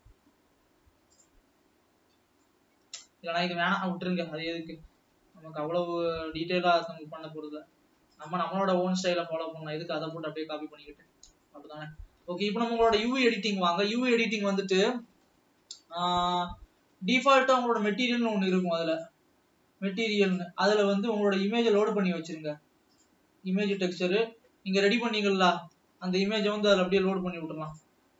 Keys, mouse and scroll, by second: 0.0 middle click, 0.5 scroll up 3, 2.0 click, 2.3-3.1 scroll up 2, 3.1 middle click, 3.5 scroll down 3, 4.6 alt+a, 5.8 l, 5.9 scroll up 1, 6.9 scroll up 2, 7.0 x, 9.0-10.0 scroll down 6, 10.8 ctrl+middle click, 11.7-13.0 middle drag, 13.0 alt+a, 13.5 ctrl+s, 14.3 click, 15.6-16.7 scroll up 4, 16.8 Tab, 20.5-25.8 drag, 26.8 click.